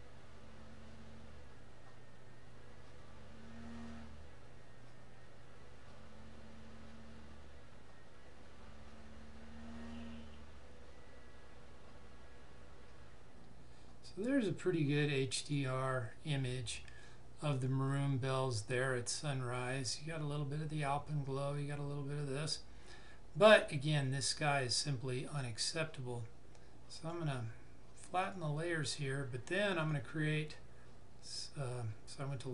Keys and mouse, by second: 14.0 click, 26.9 click, 29.7 right click.